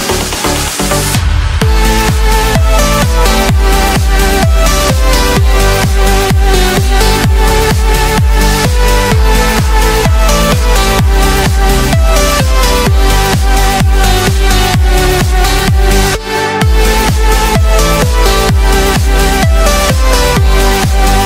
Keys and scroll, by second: 9.6 ctrl+d, 11.0 ctrl+l, 17.4 ctrl+shift+a.